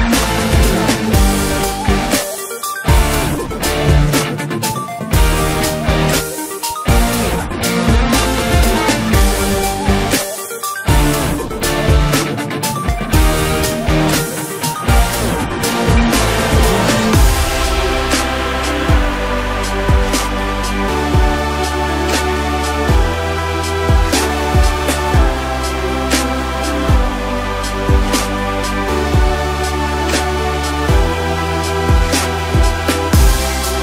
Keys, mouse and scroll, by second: 0.8 s, 2.6 Tab, 3.4 a, 4.0 s, 6.2-8.1 middle drag, 8.1-8.7 scroll up 1, 8.7 KP_1, 9.7-10.4 scroll up 2, 10.4 g, 14.1 Tab, 14.8-15.1 scroll up 2, 15.1-15.6 scroll down 7, 15.6 middle click, 16.0 click, 16.5 right click, 17.8 scroll up 2, 18.9 drag, 19.2-20.1 scroll down 2, 20.1-20.9 drag, 21.2 scroll up 1, 21.9 KP_1, 22.3 Tab, 23.6-24.8 drag, 24.8 1, 27.2 click, 28.5-29.9 middle drag, 29.9 click, 30.3-33.5 middle drag.